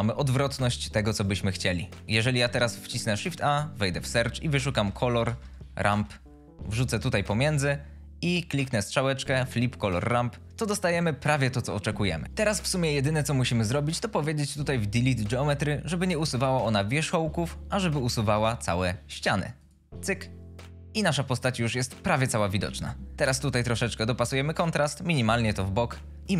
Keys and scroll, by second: 3.3 shift+a, 4.5 c, 4.8 o, 5.0 l, 5.3 r, 5.7 Down, 5.8 Return.